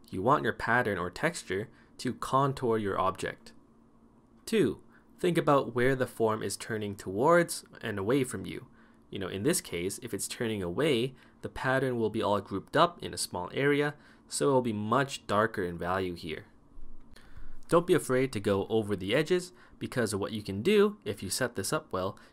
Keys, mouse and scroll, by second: 3.1 ctrl+z.